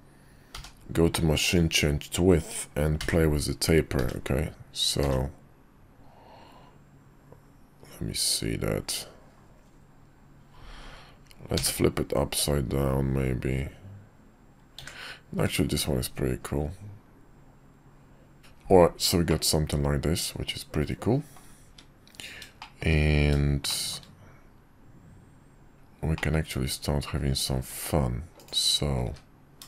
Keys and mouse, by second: 0.5 y, 19.3-21.4 middle drag, 21.6 `, 22.6 shift+middle click, 23.7 middle click, 26.1-27.5 middle drag, 27.6 `, 29.0 `.